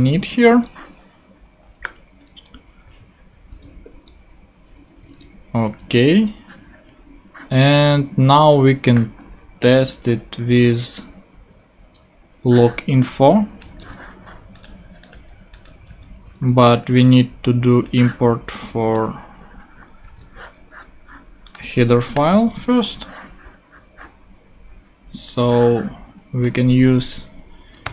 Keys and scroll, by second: 2.8 super+s, 3.5 super+Tab, 5.2 super+Tab, 13.6 super+c, 13.8 super+Tab, 15.9 super+v, 16.3 super+Tab, 20.0 super+c, 20.2 super+Tab, 22.1 Return, 22.3 super+v, 27.6-27.9 typing.